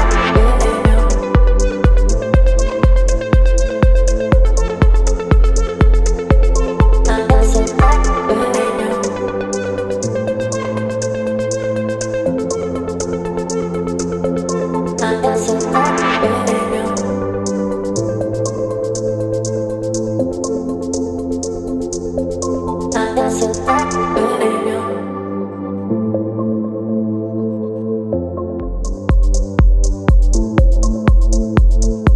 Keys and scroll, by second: 13.8 v.